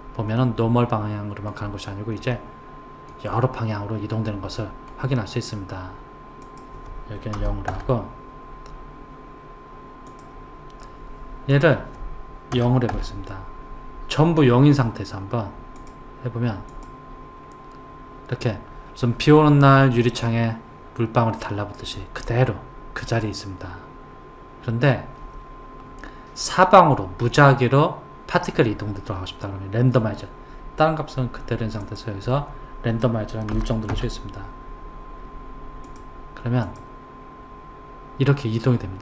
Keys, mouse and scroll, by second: 0.4-6.4 middle drag, 6.4 click, 10.1 click, 11.5 click, 15.8 click, 16.7 click, 23.1 click, 31.8 click, 35.9 click.